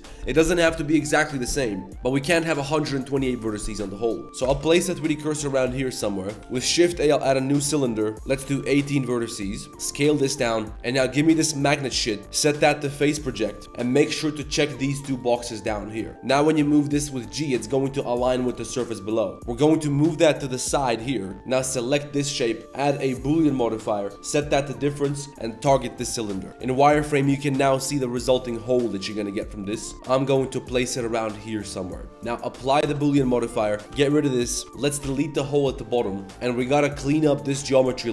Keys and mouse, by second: 4.2-6.4 typing, 5.4 click, 5.9-6.4 drag, 6.4 Tab, 8.1 click, 9.7 s, 11.1 click, 11.5-16.1 drag, 16.1 g, 19.4 g, 22.6-23.1 drag, 24.1-26.1 drag, 26.1-26.5 middle drag, 26.5 drag, 26.5 z, 26.8 middle click, 27.1 g, 29.0 middle drag, 29.5 middle drag, 29.9 click, 32.2 z, 32.8 ctrl+a, 33.2 middle drag, 33.6 click, 34.2 middle click, 34.2-36.4 typing, 34.5 click, 34.6 Tab, 36.8 alt+click, 38.0 1.